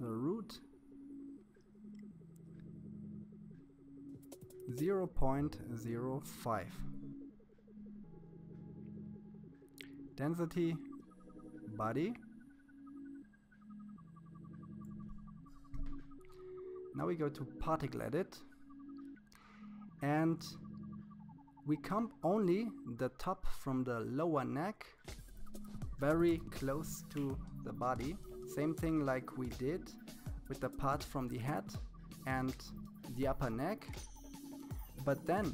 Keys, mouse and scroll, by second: 7.7-8.7 scroll down 11, 8.7-10.2 drag, 15.5-18.2 drag, 19.1 KP_3, 19.9-20.6 scroll up 3, 20.6 shift+middle click, 21.5-22.5 scroll up 3, 22.5-25.2 scroll up 2, 25.2-27.6 drag, 34.0-35.5 drag.